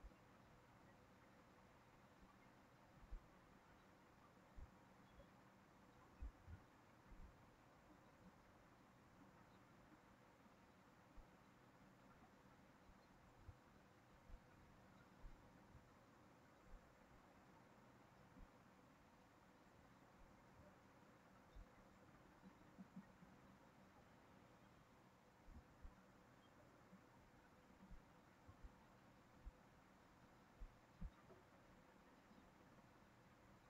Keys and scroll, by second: 4.4 ctrl+v, 8.9 ctrl+v.